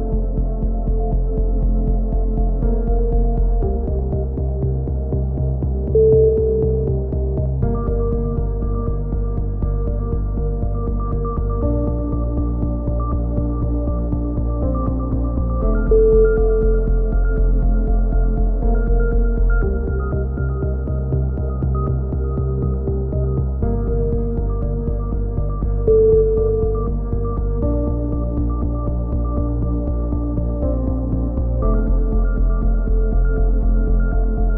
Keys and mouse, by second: 1.1 s, 1.4 s, 1.7 click, 4.1 click, 6.1 c, 7.3-8.5 drag, 11.0 click, 13.2 click, 14.2 a, 14.7 z, 14.9 click, 16.0 ctrl+r, 17.7 KP_3, 18.2 z, 18.3 middle click, 19.2 click, 20.8 c, 21.7 click, 22.0 middle click, 22.5 click, 23.9 a, 24.7 c, 25.5 click, 26.0 e, 29.0 middle click, 29.7-30.8 drag, 31.1 ctrl+l, 31.8 n, 32.6 click, 33.5 middle click, 33.8 n, 34.2 a.